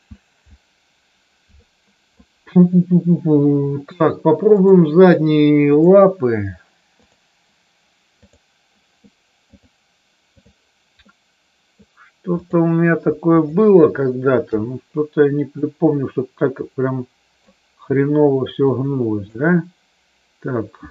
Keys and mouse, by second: 4.4-5.9 drag, 7.0 click, 8.1 click, 9.5-10.5 drag, 11.0 middle click, 13.4 shift+click, 14.5 KP_3, 15.5-17.4 drag, 18.5 click.